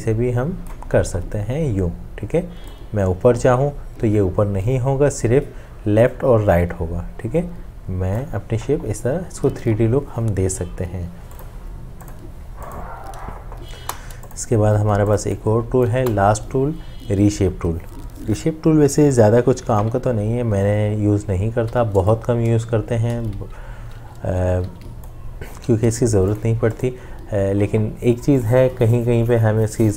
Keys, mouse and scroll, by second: 13.7 Delete, 16.0 Delete, 21.6 m, 22.7-25.4 drag, 25.6 v.